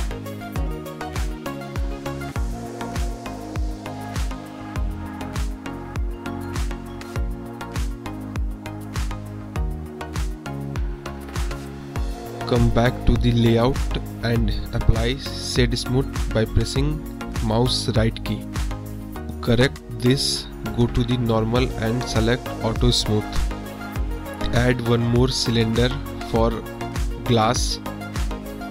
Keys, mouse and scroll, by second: 1.4-3.5 drag, 4.6-6.3 drag, 6.6 click, 7.3-7.8 middle drag, 8.1 drag, 8.5 drag, 9.1-9.6 drag, 9.9 drag, 12.8 click, 13.3 middle drag, 15.7 middle drag, 17.0 right click, 19.3 click, 19.9 click, 20.4-21.8 middle drag, 22.2 middle click, 23.8 shift+a.